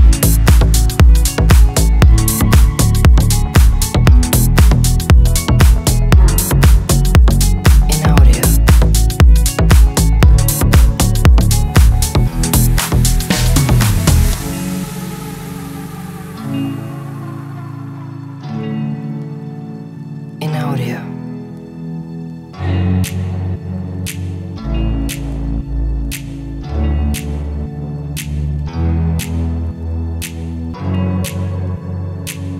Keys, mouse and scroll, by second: 1.8 shift+click, 3.2 shift+click, 3.5 shift+0, 5.4 shift+click, 5.8 shift+BackSpace, 6.1 shift+0, 6.3 shift+0, 6.9 shift+click, 7.6 shift+0, 8.4 click, 9.9 click, 10.6 shift+click, 11.7 shift+click, 12.7 click, 12.9 click, 13.2 click, 13.6 shift+click, 14.3 shift+click, 15.3 click, 15.5 shift+click, 16.1-16.5 middle drag, 17.3-18.0 drag, 18.6 click, 19.0 shift+click, 19.2 shift+0, 19.5 shift+0, 20.0 g, 20.1 z, 20.7 drag, 22.1 click, 22.3 shift+click, 24.0 ctrl+s, 27.7 ctrl+s, 28.5 click, 29.2 ctrl+z, 29.7 click, 30.0 click, 30.7-31.8 drag.